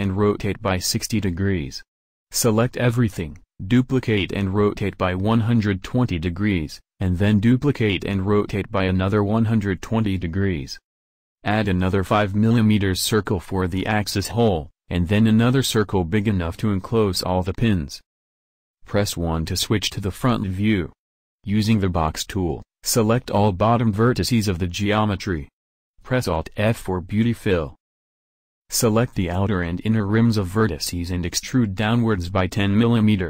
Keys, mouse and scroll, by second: 0.1 a, 0.2 a, 0.7 shift+d, 2.7 shift+d, 12.2 a, 12.7 shift+a, 15.4 shift+a, 16.3 s, 19.1 KP_1, 21.1 a, 21.7 b, 27.3 alt+f, 28.6 a, 30.8 e.